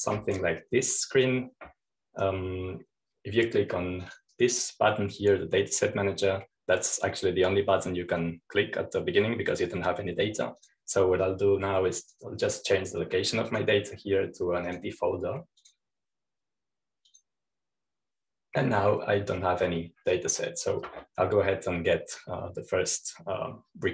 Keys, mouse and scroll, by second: 2.7-3.7 drag, 5.6-7.0 drag, 12.2 click, 13.6 click, 15.1-17.2 drag, 17.2-19.7 drag, 20.8-21.4 scroll down 1, 21.4-23.9 scroll up 1.